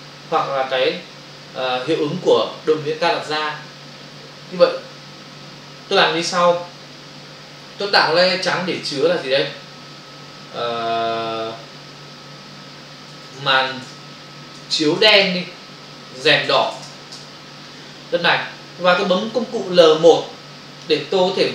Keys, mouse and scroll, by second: 4.6 click, 6.4 click, 10.0 ctrl+shift+n, 13.5 space, 14.6 i, 14.9 space, 16.0-16.5 typing, 17.1 Return, 19.5 click.